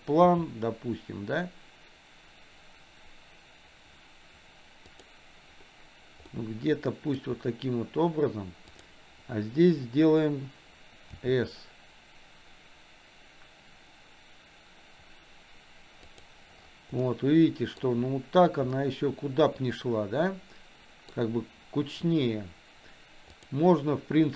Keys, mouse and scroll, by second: 0.6 s, 6.5-7.9 middle drag, 11.1 s, 17.3 middle click, 19.5-21.7 middle drag, 21.5 scroll down 1, 23.5-24.3 drag.